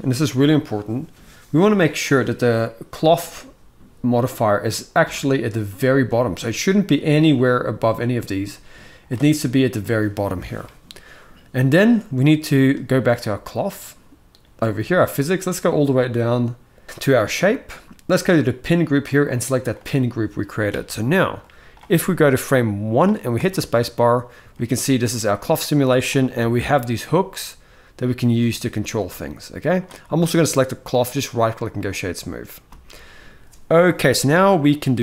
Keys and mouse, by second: 2.7-8.9 drag, 13.3 click, 17.0 click, 18.4-19.6 drag, 21.2 click, 22.0 click, 23.1 space, 24.3 shift+middle click, 25.6 click, 28.1 g, 29.4 click, 30.8-31.5 right drag, 32.3 space.